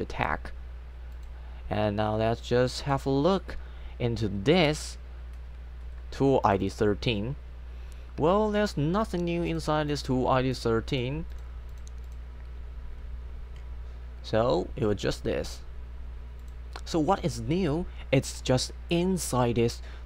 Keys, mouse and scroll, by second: 1.2 click, 6.4 click, 6.6 click, 9.1 click, 9.9 click, 10.6 click, 11.0 click.